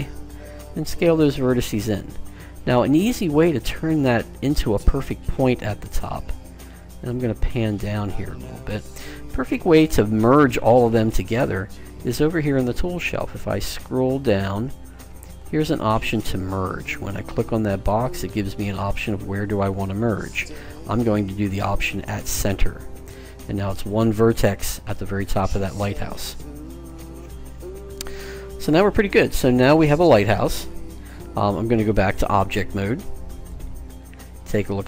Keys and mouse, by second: 0.6 s, 3.5 click, 6.2-10.0 middle drag, 12.7-14.5 drag, 17.2-19.0 drag, 24.4-31.5 middle drag, 33.5 click, 34.0-34.8 middle drag.